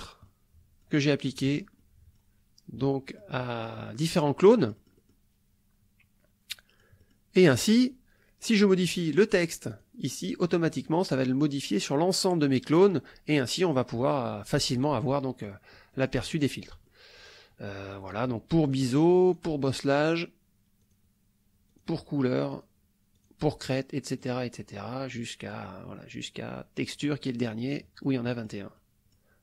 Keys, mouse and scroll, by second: 0.3 click, 1.1-2.4 drag, 2.9-4.3 drag, 4.6 click, 6.5 click, 7.0 middle click, 8.4 click, 9.7 click, 15.1 middle click, 15.4 click, 15.9 click, 16.3 middle click, 16.4-17.4 drag, 18.7 click, 19.3 click, 20.8 click, 21.7 click, 22.5 click, 23.2 click, 24.2 click, 26.9 click, 28.0 click, 28.8 click.